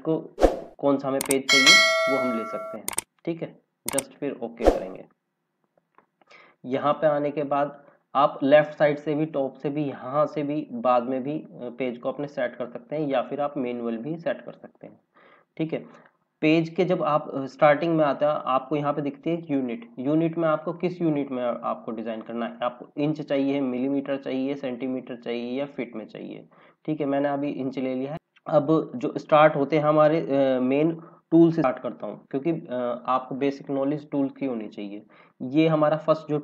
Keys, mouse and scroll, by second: 1.9 click, 6.8 click, 8.7 click, 14.8 click, 17.8 click, 20.7 click, 26.7 click, 31.6 F5.